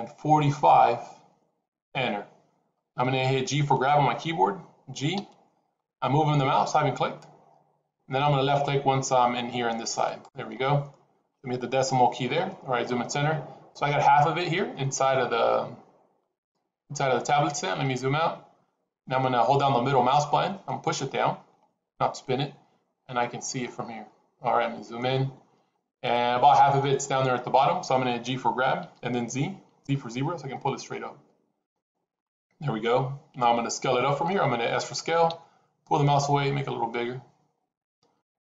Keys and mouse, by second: 5.1 g, 11.9 KP_Decimal, 20.6-23.6 middle drag, 24.9-26.7 middle drag, 28.7 g, 32.2-34.2 middle drag, 35.2 s.